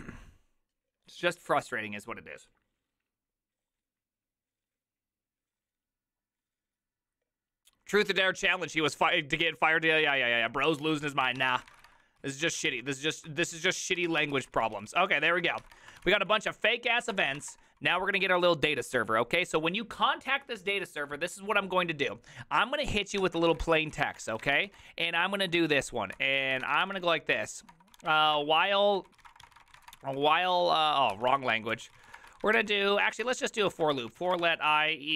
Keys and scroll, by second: 11.1-12.6 typing, 12.4 ctrl+c, 12.5 ctrl+:, 12.7 Return, 12.9 ctrl+p, 13.3 ctrl+c, 13.5 ctrl+u, 14.0 ctrl+u, 14.0 ctrl+c, 14.1 ctrl+:, 14.2 Return, 14.3 ctrl+u, 14.5 ctrl+u, 14.7 ctrl+u, 15.3-18.9 typing, 17.1 Return, 23.3-35.1 typing.